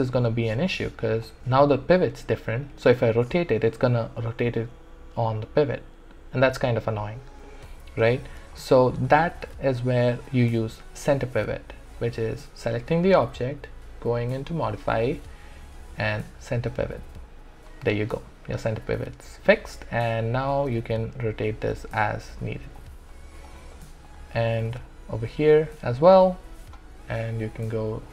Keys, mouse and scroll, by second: 3.0 e, 3.7-7.0 drag, 7.0 ctrl+z, 8.1 w, 8.5-11.9 alt+drag, 14.4 click, 16.8 click, 20.7 e, 21.5-23.5 drag, 25.4 w.